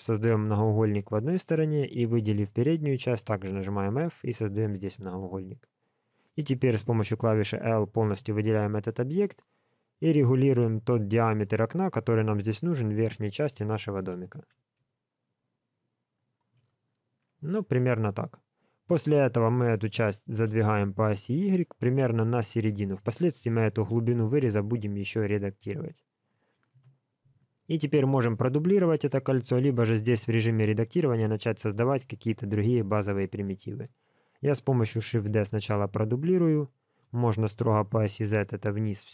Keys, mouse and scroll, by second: 0.7 middle click, 1.7 alt+click, 2.2 middle click, 3.4 f, 8.0 KP_1, 9.1 s, 16.5 s, 17.5 middle click, 20.3 g, 24.7-26.1 scroll down 1, 26.1-26.7 scroll down 1, 26.7 KP_1, 29.2 shift+middle click, 30.0-30.5 scroll down 2, 30.5 shift+middle click, 31.4 scroll up 1, 35.2 shift+d.